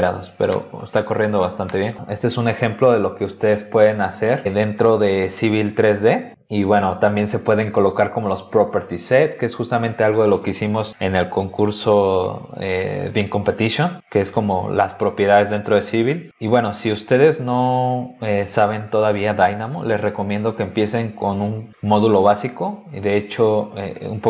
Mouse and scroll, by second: 0.1 scroll down 2, 0.5 middle click, 1.7 scroll down 2, 8.7 click, 16.5 click, 23.7 click.